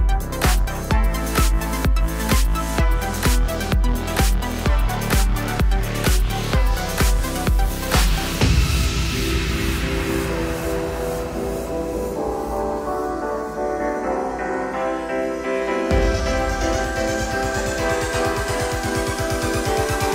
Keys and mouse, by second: 0.0-5.5 typing, 0.1 middle click, 0.2 click, 0.4 middle click, 0.6 click, 1.0 middle click, 1.3 middle click, 1.5 click, 1.9 middle click, 2.0 click, 2.6 middle click, 2.8 click, 3.6 middle click, 3.9 click, 4.1 middle click, 4.4 click, 4.9 middle click, 5.0 click, 5.5 middle click, 5.8 alt+z, 6.4-7.4 middle drag, 7.4 click, 7.6-14.3 middle drag, 7.6 g, 9.0 g, 10.2 click, 10.6 g, 13.6 Tab, 14.0-15.5 drag, 14.3 Tab, 15.2 2, 15.5-16.5 alt+middle drag, 15.6 alt+z, 16.0 alt+z, 16.4 1, 16.5 ctrl+click, 16.6 ctrl+i, 16.6-19.1 middle drag, 17.7-20.1 typing, 19.1-20.1 right drag.